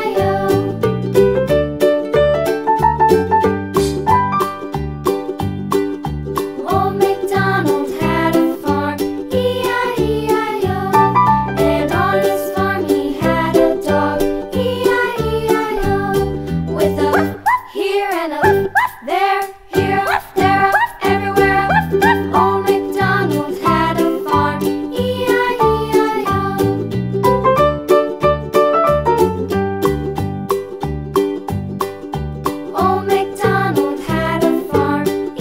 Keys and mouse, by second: 2.5-6.3 middle drag, 25.0-26.6 drag, 28.9-31.9 drag, 31.9 middle click.